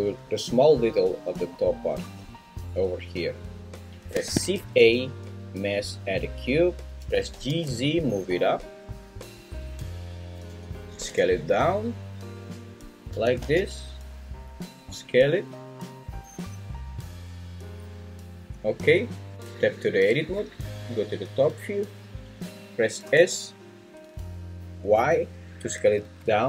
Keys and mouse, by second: 4.2 shift+a, 7.0 g, 7.6 z, 9.4 click, 10.4 g, 10.8 Escape, 10.8 ctrl+z, 11.0 s, 13.1 g, 13.4 z, 14.5 click, 14.9 s, 18.4 click, 19.4 Tab, 20.3 `, 23.0 s, 24.9 y.